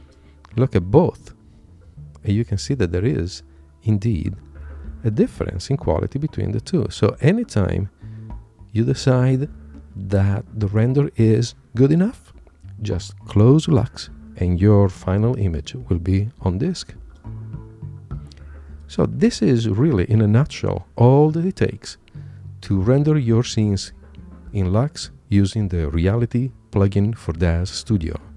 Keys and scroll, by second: 1.0 Right, 1.8 Left, 17.9 super+Tab.